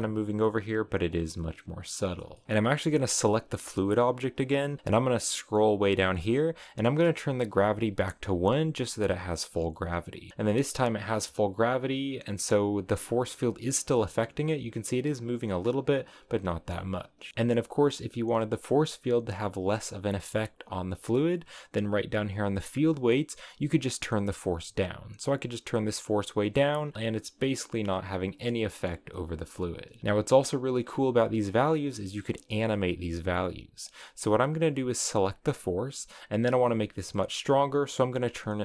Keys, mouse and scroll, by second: 0.6-2.4 middle drag, 2.4 space, 2.8 right click, 2.9 space, 4.0-4.5 scroll down 12, 5.3-8.3 drag, 9.5 click, 10.3 space, 11.8 scroll down 1, 14.0 shift+middle click, 14.3 scroll up 3, 15.9 scroll down 5, 16.1-17.1 middle drag, 16.9 scroll up 2, 17.2 space, 17.3-21.2 middle drag, 23.4-26.9 drag, 26.9-27.5 scroll up 1, 27.5-30.0 middle drag, 30.0 space, 31.0-32.7 drag, 35.0 right click, 37.3-38.6 drag.